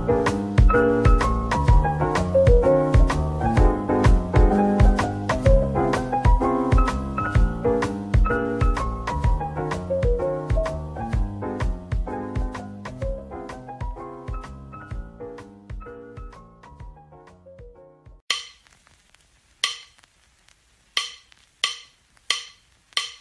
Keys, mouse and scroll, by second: 0.6-2.0 typing, 3.3 scroll, 3.4-3.8 scroll up 1, 3.8 middle click, 20.7-21.1 scroll down 1.